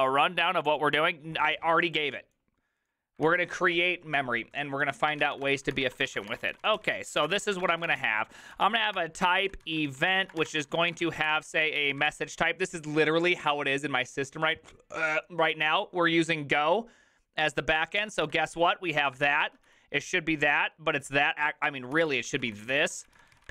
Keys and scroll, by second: 5.0-12.9 typing, 18.2 ctrl+c, 18.2-20.5 typing, 21.7-23.5 typing.